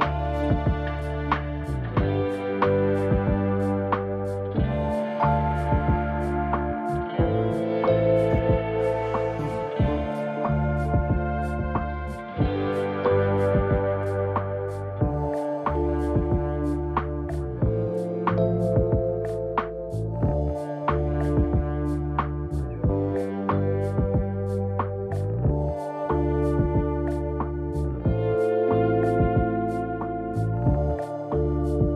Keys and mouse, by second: 1.1 shift+click, 1.6 g, 4.9 Tab, 5.7 Tab, 8.2 alt+z, 11.6 ctrl+r, 13.5 click, 14.9 ctrl+r.